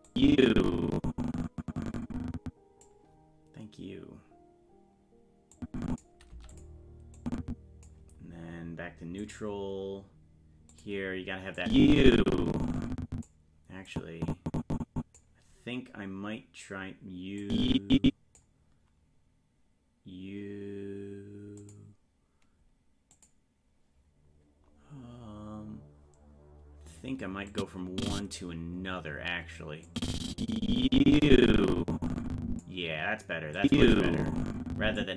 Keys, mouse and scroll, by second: 0.1-2.9 drag, 5.6 click, 6.3 i, 7.2 click, 9.2 click, 10.7 click, 11.6-13.3 drag, 13.9-15.2 drag, 17.4 click, 21.6 click, 23.1 click, 24.7-25.2 scroll up 1, 27.5 click, 27.5 scroll up 4, 28.5-29.9 scroll down 1, 29.9-32.6 drag, 29.9-30.3 scroll down 2, 33.6-35.0 drag.